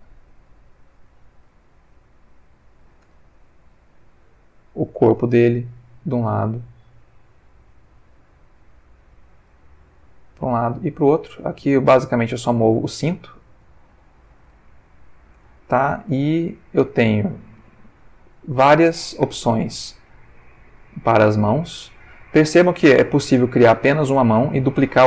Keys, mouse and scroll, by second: 0.5-2.9 drag, 3.0 Tab, 3.6-4.0 drag, 5.1 Tab, 5.9-8.9 drag, 9.1 Tab, 9.8-14.4 drag, 14.7-15.5 ctrl+middle drag, 15.6-16.3 ctrl+shift+middle drag, 16.3 shift+Tab, 16.8 click, 18.3-19.9 drag, 20.0 Tab, 20.9-25.0 drag.